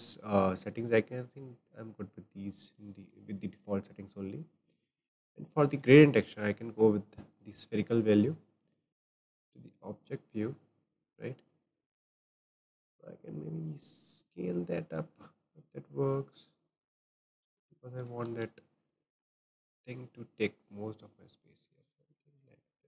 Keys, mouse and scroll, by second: 0.5 scroll up 1, 0.6-5.7 shift+middle drag, 5.7-10.2 drag, 12.2 click, 16.3-18.3 drag, 18.3 ctrl+z, 18.9-22.0 shift+drag.